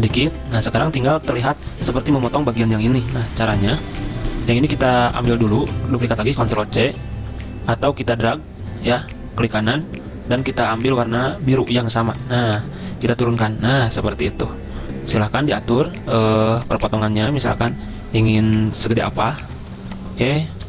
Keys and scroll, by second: 6.4 ctrl+c, 13.1 ctrl+Page_Down, 13.2 ctrl+Page_Down, 13.3 ctrl+Page_Down.